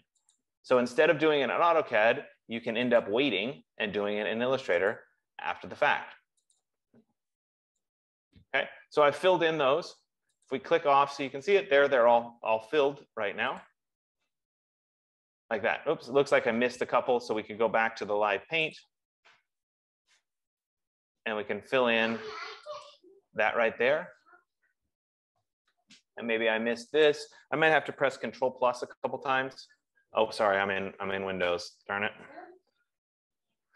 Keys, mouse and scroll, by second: 0.8 click, 3.6 click, 5.4 click, 7.0 click, 11.0 click, 14.2 click, 19.2 click, 21.2 click, 23.3 click, 27.5 click, 28.6 super+=, 29.3 super+=.